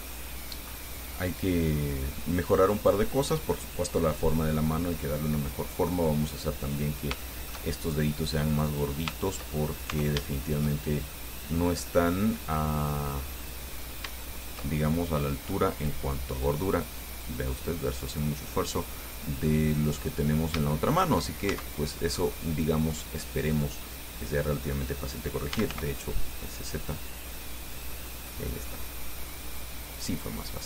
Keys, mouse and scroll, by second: 2.9 scroll down 1, 3.3 click, 4.5 scroll down 1, 5.2-6.3 drag, 7.0-7.3 scroll up 1, 7.4 shift+click, 8.4 right click, 8.8 click, 9.7-10.1 shift+scroll up 2, 10.1 Tab, 10.5 shift+click, 10.8 shift+middle click, 11.4 middle click, 12.3 scroll up 2, 12.9 middle click, 13.9 right click, 14.5 shift+right click, 16.7-18.4 drag, 18.5-19.6 middle drag, 19.8 scroll down 1, 20.9 shift+middle click, 21.7 shift+Tab, 22.4-22.7 scroll down 1, 25.5-26.4 typing, 28.0 click, 28.3-29.7 middle drag, 30.5-30.6 middle drag.